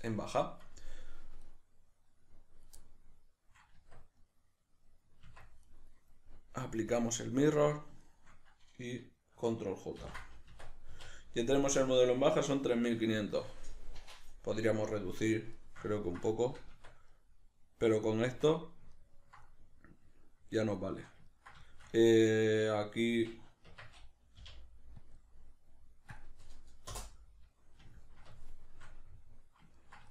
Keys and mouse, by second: 1.4 right click, 2.7-5.7 middle drag, 3.7 Tab, 5.3 Tab, 5.7 right click, 6.9-8.0 drag, 8.0 shift+right click, 10.0 ctrl+j, 15.6-30.1 shift+middle drag, 16.8 Tab, 18.3 Tab, 23.7 Tab.